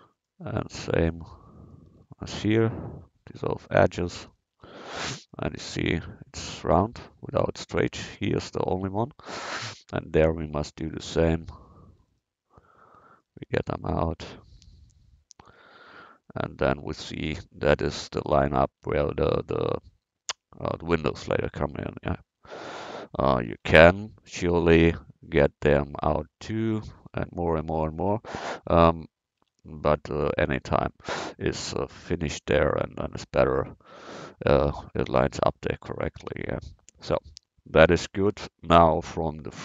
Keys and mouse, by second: 2.3 x, 4.6 Tab, 8.7 Tab, 11.2 middle click, 13.6 x, 15.5 Tab, 15.7-16.3 middle drag, 18.8 Tab, 23.7 a, 27.3 x, 28.6 Tab, 29.5 Tab, 36.2 Tab.